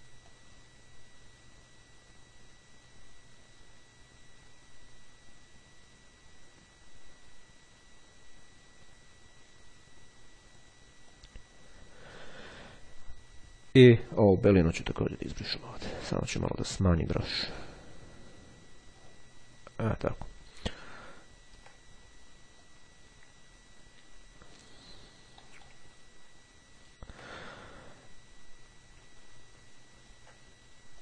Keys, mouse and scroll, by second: 0.4-11.2 drag, 13.1-13.7 ctrl+scroll down 2, 13.8-15.0 ctrl+scroll up 2, 16.0 [, 17.2 ], 17.7-20.6 drag, 20.8-21.8 ctrl+scroll down 1, 22.7-25.4 drag, 25.6 ctrl+middle click, 26.0-26.6 ctrl+scroll down 2, 26.8-27.4 ctrl+scroll down 2, 29.3-30.6 ctrl+scroll up 2.